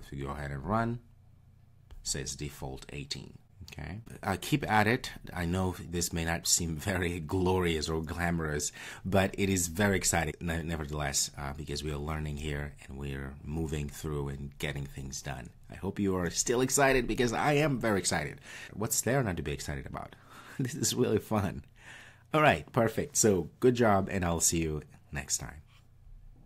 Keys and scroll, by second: 0.6 ctrl+r.